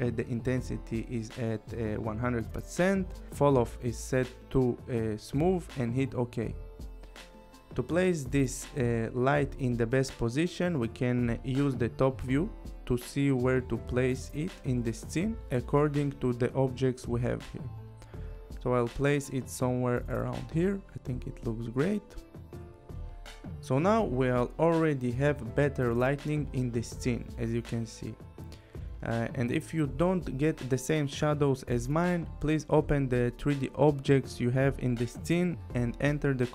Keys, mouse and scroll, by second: 0.9 click, 1.4 click, 6.0 click, 8.5 click, 10.2 click, 12.4 click, 13.2 click, 13.8 scroll, 14.7 scroll, 14.9 click, 15.8 click, 20.9 click, 21.6 click, 25.1 click, 25.8 click, 32.8 click, 34.3 click, 35.6 click, 36.4-36.5 scroll.